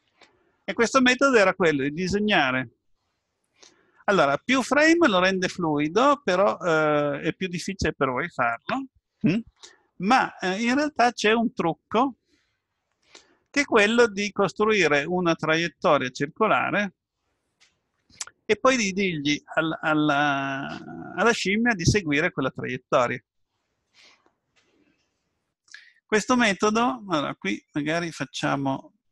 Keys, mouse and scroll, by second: 5.7 middle click, 7.4 KP_7.